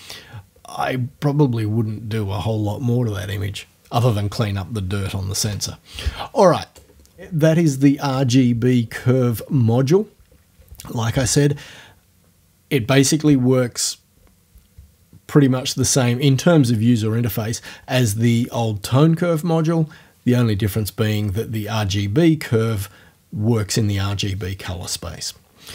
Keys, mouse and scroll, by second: 5.4 o, 6.8 right click.